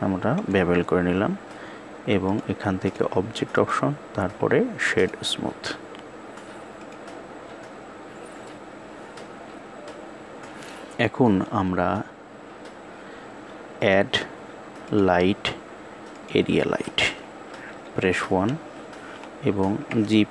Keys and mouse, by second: 1.9 click, 3.2-4.8 right drag, 6.4 click, 13.6-16.0 drag, 17.5 KP_1, 19.5 g.